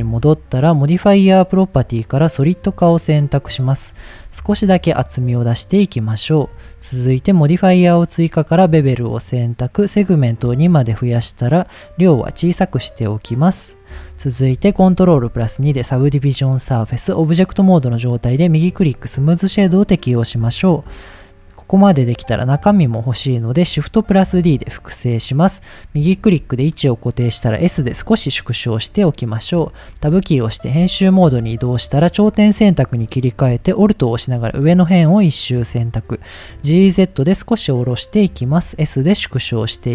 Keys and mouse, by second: 2.4 click, 2.7 middle drag, 4.0 shift+middle click, 5.0-6.4 shift+drag, 8.3 click, 10.0 click, 10.7-12.0 drag, 12.4-13.8 shift+drag, 15.2 ctrl+2, 15.7 middle drag, 17.2 right click, 18.2 middle drag, 20.6 shift+middle click, 24.5 shift+d, 25.1 right click, 26.0-26.4 shift+middle drag, 27.7 s, 28.7 click, 30.0 Tab, 31.1 shift+middle click, 32.2 click, 36.6 g, 36.8 z, 38.2 click, 38.6 s.